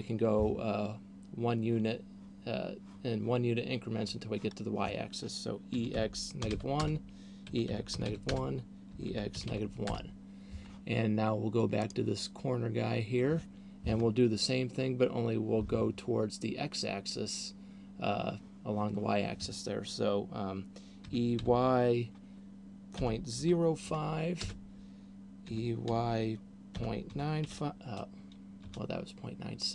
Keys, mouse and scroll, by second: 6.0 e, 7.5 e, 8.8 e, 11.8 right click, 21.3 e, 25.5 e.